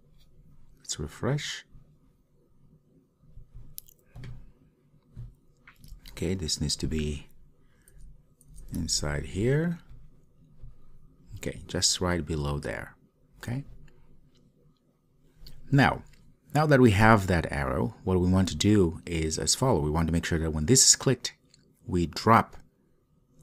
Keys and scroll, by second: 6.0 super+x, 9.0 super+v.